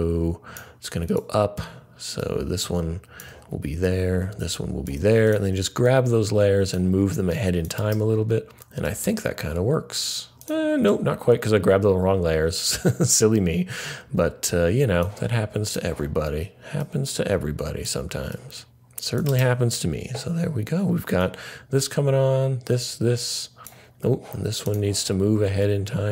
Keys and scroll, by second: 10.3 super+z, 18.6 super+z.